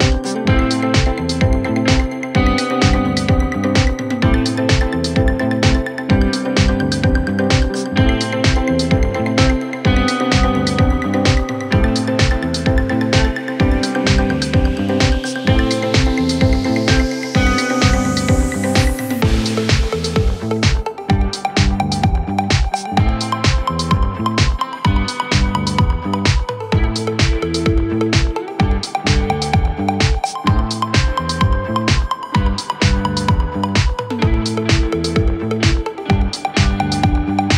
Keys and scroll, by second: 0.1 ctrl+d, 0.3 ctrl+d, 0.6 ctrl+d, 1.2 ctrl+d, 13.0 Return, 19.1 ctrl+space, 19.8 space, 22.7 space, 28.1-29.2 typing, 31.7 ctrl+space, 35.7 1, 36.6 5, 37.4 ctrl+d.